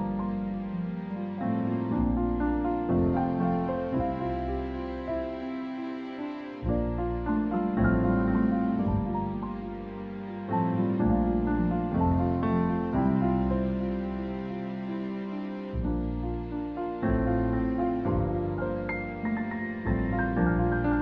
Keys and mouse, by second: 2.7 click, 13.4 click, 17.1 click, 17.7 click, 18.6 click, 20.3 click.